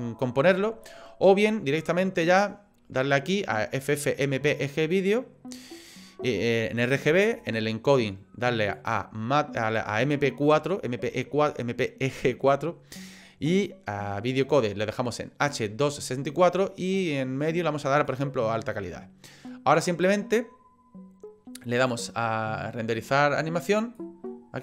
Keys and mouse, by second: 1.8-4.9 drag, 7.5 click, 8.8-10.0 drag, 16.9-18.1 drag, 21.9-24.6 drag.